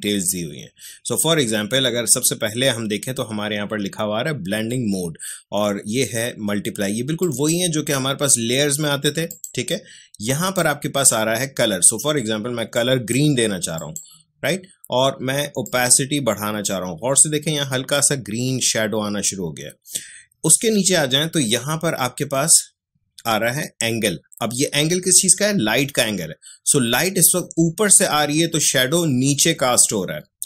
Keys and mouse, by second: 7.2-30.4 drag.